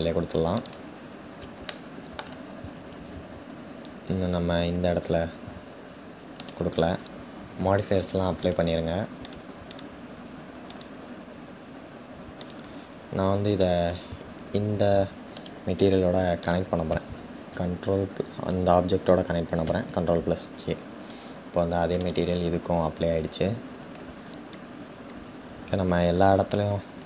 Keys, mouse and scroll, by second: 1.3 scroll down 1, 1.3-1.9 shift+middle drag, 1.9 scroll down 1, 4.5-5.3 scroll up 12, 5.3-6.0 scroll down 1, 6.0 click, 9.3-13.3 drag, 15.0 shift+click, 16.1 shift+click, 22.2-22.6 scroll down 2, 23.0-23.7 scroll down 1, 26.7-27.0 drag.